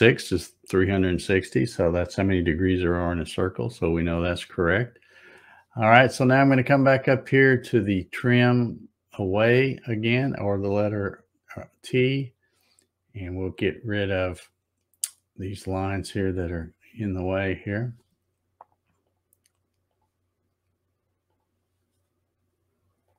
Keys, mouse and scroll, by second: 4.2-4.7 scroll up 1, 4.7 middle click, 10.3 click, 15.0 click, 16.3 click, 17.6 click, 19.0 click, 19.9 click, 21.3 click, 23.0 click.